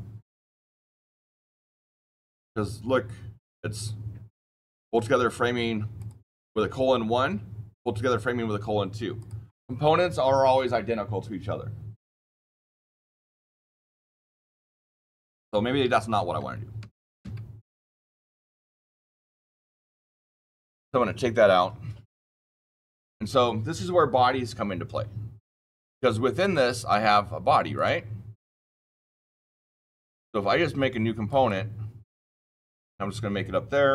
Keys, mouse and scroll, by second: 3.3 click, 5.9 click, 9.1 click, 13.7 ctrl+z, 15.2 ctrl+z, 15.7 ctrl+z, 16.3 ctrl+z, 16.7 ctrl+z, 17.1 ctrl+z, 17.6 ctrl+z, 18.0 ctrl+z, 19.1 ctrl+z, 20.0 click, 26.3 click, 27.7 click, 29.8 click, 31.2 click.